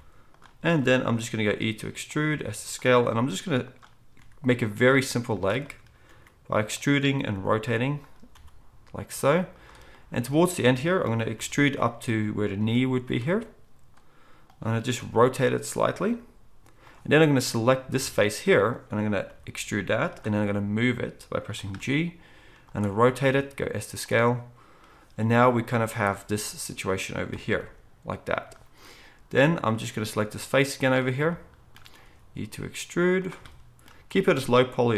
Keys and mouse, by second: 1.3 e, 2.2 s, 3.0 g, 4.1 r, 4.7 e, 6.0 r, 7.3 g, 8.3 e, 12.6 g, 13.3 s, 15.0-26.3 middle drag, 15.0 r, 16.0 g, 19.2 e, 20.3 g, 21.7 r, 23.2 s, 26.3-33.3 drag, 27.5 g, 32.0 e, 33.3-34.9 shift+middle drag, 34.0 e.